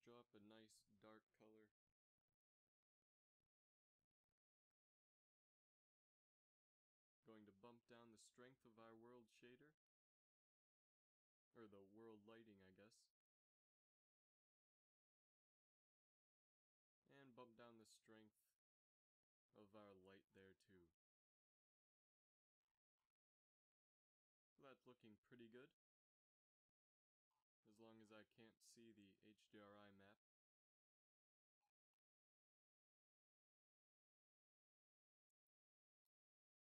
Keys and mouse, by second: 4.0 z, 4.2 z, 13.2-14.5 drag, 14.5 middle click, 15.1-20.1 drag, 22.3 shift+z, 25.8 KP_5, 32.4 z, 32.5 z, 34.0-34.6 drag, 34.6 s.